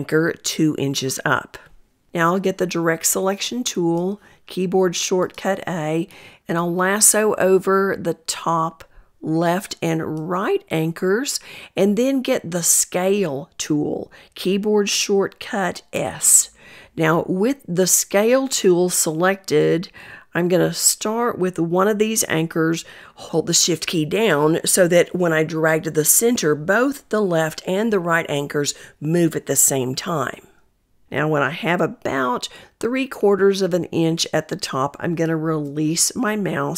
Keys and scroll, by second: 2.7 a, 12.4 s, 12.9 s.